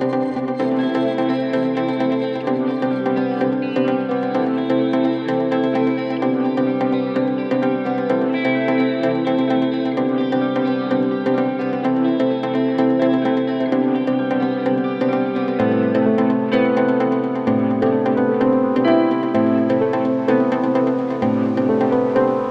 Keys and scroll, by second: 0.1 ctrl+j, 7.7 ctrl+g, 20.6-21.6 typing.